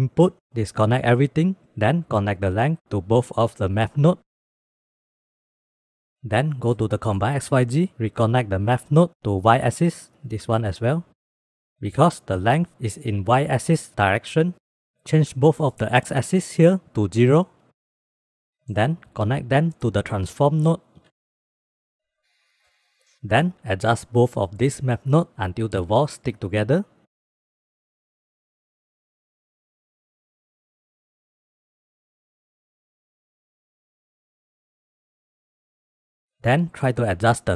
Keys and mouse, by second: 0.8 ctrl+click, 1.8-2.3 drag, 2.6 middle click, 3.1 click, 3.9-4.7 drag, 4.8 middle drag, 5.0 click, 5.3 g, 5.8 middle click, 6.5 middle click, 8.8-9.7 drag, 10.9-11.6 drag, 15.4-16.6 drag, 17.3-18.3 drag, 18.5-18.9 middle drag, 19.1-19.9 drag, 20.8 click, 22.2 click, 22.6 drag, 22.9 click, 27.2 click, 28.1 click, 28.8 click, 29.6 click, 29.9 shift+click, 30.3 shift+b, 31.5 middle click, 32.5 shift+middle click, 33.0 shift+b, 34.0 click, 35.2 click, 36.1 middle click, 37.5 click.